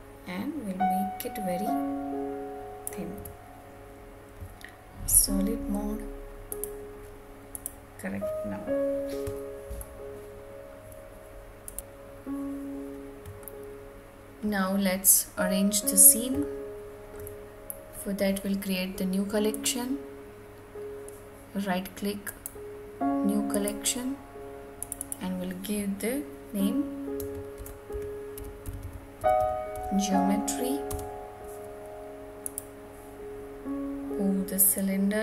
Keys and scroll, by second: 3.2 Tab, 30.8 Return.